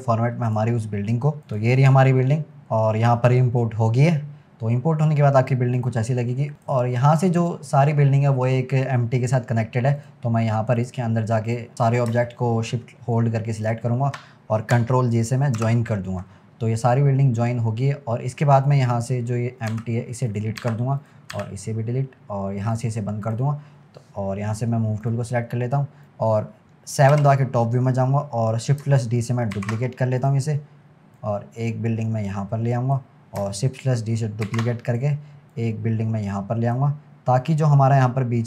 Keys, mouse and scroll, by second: 4.5-5.1 scroll down 3, 5.1-5.8 scroll up 1, 5.8 click, 6.6 click, 7.5 click, 10.0 click, 10.8 click, 11.5 click, 11.7-13.6 scroll down 8, 13.6 shift+click, 16.0 ctrl+j, 16.9 scroll up 1, 18.7 click, 19.8 Delete, 20.3 click, 20.6 Delete, 21.0 click, 21.3 Delete, 22.8 drag, 23.3 click, 25.0-26.0 drag, 27.1 KP_7, 28.1-28.6 scroll up 1, 28.6-30.0 scroll up 1, 30.0 shift+d, 31.2 click, 34.9 shift+d, 35.5 click, 37.4 click.